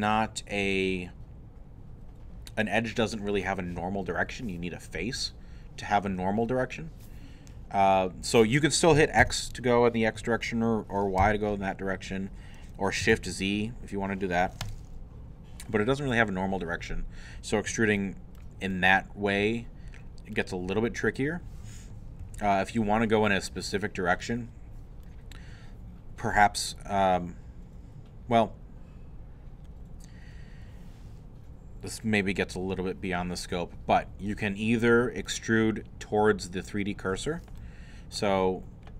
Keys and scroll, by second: 9.2 x, 11.2 y, 13.2 shift+z.